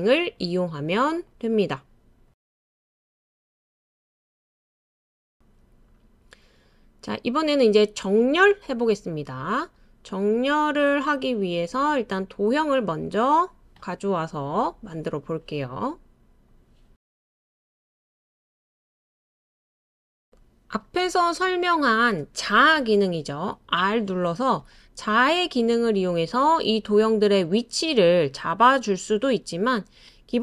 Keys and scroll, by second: 4.2 \, 4.2 BackSpace, 10.6 super+c, 10.7 super+v, 24.7 r.